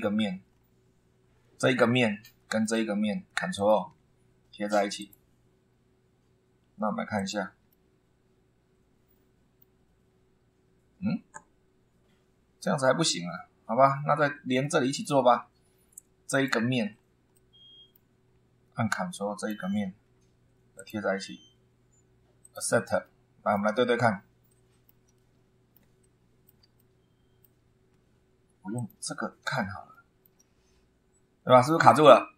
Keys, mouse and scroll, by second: 0.5-1.9 scroll down 2, 1.9 middle click, 3.5 ctrl+click, 5.0 click, 7.2 click, 7.7-9.8 middle drag, 14.6 middle click, 15.4 scroll up 1, 16.3 click, 16.8 scroll down 1, 17.3 middle click, 18.2 scroll up 1, 19.4 ctrl+click, 20.8 click, 22.4 click, 23.0 middle click, 24.5 shift+middle click, 25.1 shift+middle click, 25.2 shift+click, 26.0 shift+middle click, 26.8 shift+middle click, 28.7 click, 29.9 shift+middle click, 30.1 shift+click, 30.4-31.0 shift+scroll up 3.